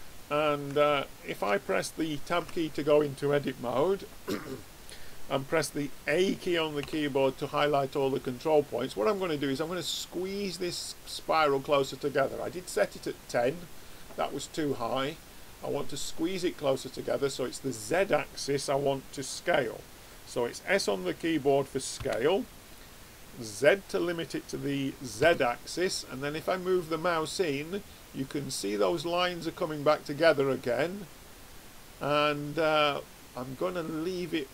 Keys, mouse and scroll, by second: 0.7-2.4 drag, 2.4 Tab, 6.7 a, 21.9 s.